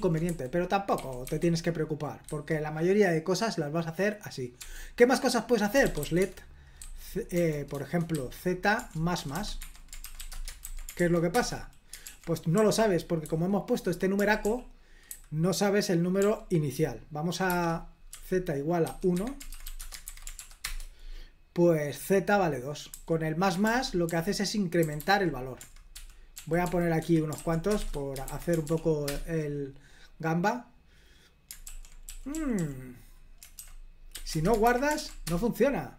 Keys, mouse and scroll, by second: 0.3 h, 1.0 x, 1.3 x, 2.3 Escape, 4.6-8.1 typing, 9.2-10.6 typing, 9.6 Escape, 10.7 super+h, 11.0 ctrl+p, 11.4 Return, 12.6 super+l, 14.2-15.1 typing, 16.2 d, 17.5-20.3 typing, 19.2 Escape, 20.4 ctrl+p, 20.7 Return, 22.9 j, 23.7 super+l, 24.1-27.9 typing, 27.0 Escape, 28.3 super+h, 28.7 ctrl+p, 29.1 Return, 31.7 super+l, 32.1-32.6 typing, 33.6-34.2 typing, 34.4 Return, 34.7 super+h, 35.0 ctrl+p, 35.3 Return.